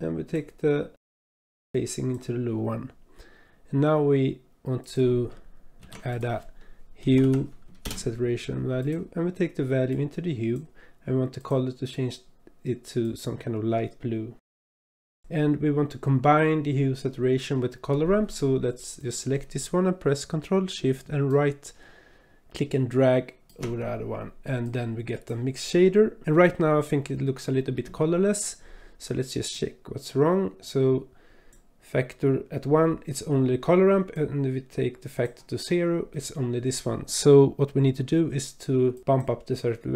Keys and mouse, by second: 1.0 click, 1.0 click, 1.6-2.2 drag, 4.8 click, 5.8 shift+a, 9.9-10.5 drag, 11.4 click, 15.0 click, 21.3-23.6 ctrl+shift+drag, 24.6 click, 29.5-31.5 drag, 34.1-35.3 drag, 36.1 click, 38.9 click.